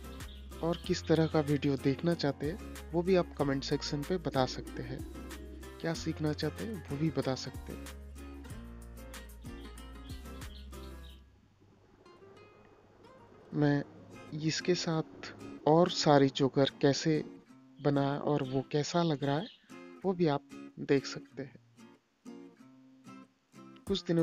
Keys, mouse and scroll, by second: 7.1 click, 7.5 click.